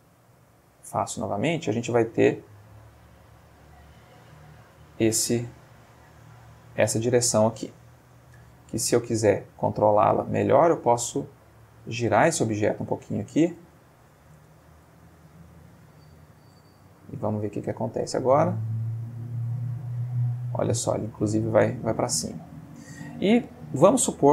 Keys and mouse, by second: 3.1 Escape, 4.8-7.3 drag, 9.3 click, 10.6 r, 11.7 Escape, 12.2-13.3 ctrl+middle drag, 13.6 r, 14.3 space, 15.0-15.5 ctrl+middle drag, 15.6 ctrl+middle click, 16.1-16.7 ctrl+middle drag, 17.2-17.9 drag, 18.0 space, 22.2 Escape.